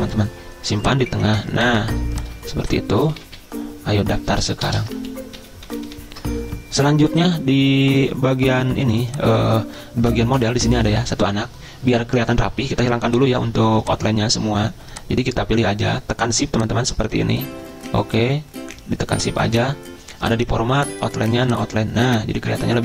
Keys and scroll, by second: 3.0-5.0 typing, 5.1 ctrl+a, 5.5 ctrl+[, 5.8 ctrl+[, 6.0 ctrl+[.